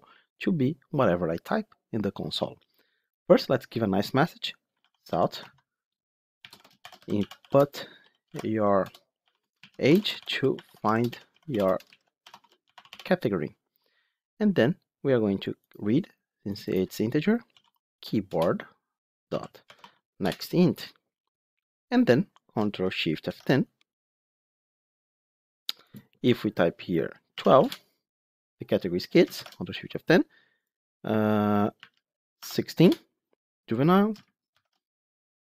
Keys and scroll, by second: 5.3 Tab, 9.4 Tab, 18.2 Return, 20.1 Return, 23.1 ctrl+shift+F10, 29.3 ctrl+shift+F10, 34.4 ctrl+shift+F10.